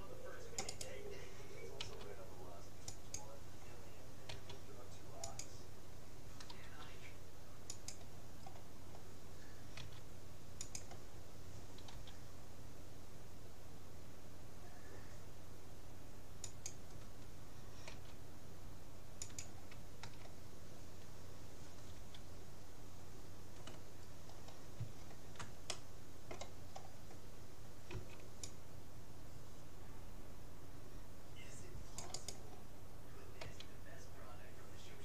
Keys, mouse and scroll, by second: 1.8 s, 4.4 s, 6.6 g, 8.6-10.8 middle drag, 9.8 s, 12.0 g, 17.9 s, 20.0 a, 22.0 g, 24.2 middle click, 25.8-27.4 middle drag, 27.8 middle click, 27.9 c, 33.4 s.